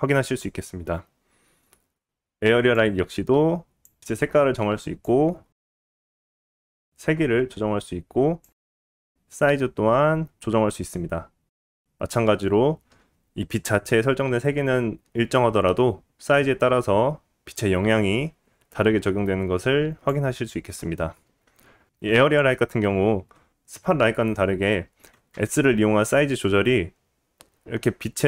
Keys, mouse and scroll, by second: 1.7 click, 5.7 g, 7.3-28.2 drag, 25.3 s.